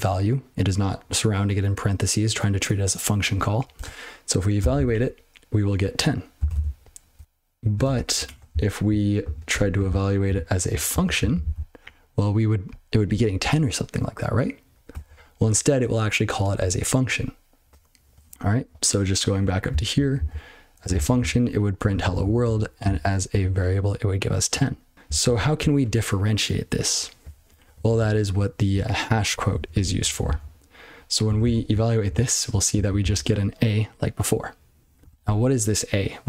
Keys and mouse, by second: 4.7 ctrl+c, 6.5 ctrl+n, 8.3 Return, 8.5-8.9 ctrl+n, 9.2 ctrl+p, 9.5 Tab, 9.8-10.2 ctrl+n, 10.3-10.9 ctrl+p, 11.2 ctrl+n, 11.4 ctrl+n, 15.0 ctrl+c, 18.7-19.4 ctrl+p, 19.7 ctrl+n, 19.9 ctrl+n, 20.1 ctrl+n, 20.8 ctrl+space, 20.9 ctrl+n, 21.1 ctrl+n, 21.8 ctrl+g, 22.0 ctrl+p, 22.2 ctrl+p, 22.4 ctrl+p, 22.8 ctrl+space, 22.8 ctrl+n, 23.3 ctrl+g, 24.5-24.9 ctrl+n, 25.1 ctrl+n, 25.3 ctrl+n, 25.5 ctrl+n, 27.2 ctrl+p, 27.4 ctrl+p, 27.7 ctrl+p, 27.9 ctrl+p, 28.3 ctrl+e, 28.7-29.1 ctrl+b, 29.5 ctrl+f, 29.7 ctrl+f, 30.0 ctrl+n, 30.2 ctrl+n, 31.6 ctrl+c, 31.7-32.0 ctrl+n, 32.1-32.5 ctrl+p, 32.7 ctrl+n, 33.0 ctrl+n.